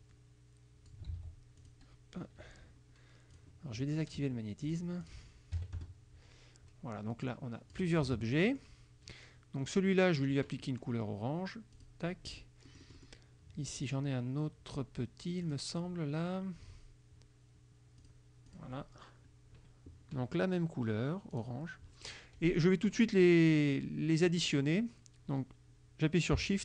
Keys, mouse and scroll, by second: 0.0 click, 1.2 ctrl+z, 1.7 ctrl+click, 3.4 click, 4.8 click, 5.1 click, 5.6 KP_Subtract, 5.8 KP_Add, 7.3 click, 8.1 ctrl+z, 8.5 ctrl+click, 10.0 click, 11.8 click, 12.8 click, 13.9 click, 15.5 click, 18.1 click, 18.5 click, 21.4 click, 23.8 click.